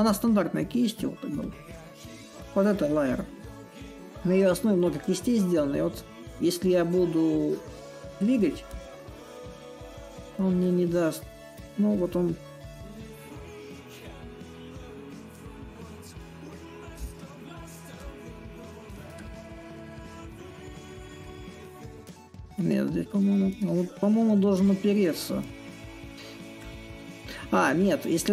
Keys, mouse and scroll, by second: 0.0-2.8 drag, 11.8 click, 12.6-16.7 drag, 17.7-19.2 drag, 19.7 click, 26.4 click, 26.9-28.3 drag.